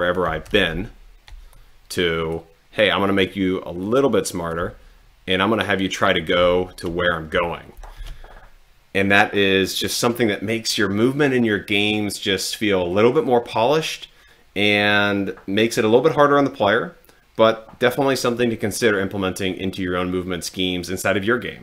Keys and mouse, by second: 0.5 Left, 0.9 Up, 1.6 click, 3.1 click, 4.0 click, 4.7 Down, 6.3 Right, 6.5 Left, 7.7 Left.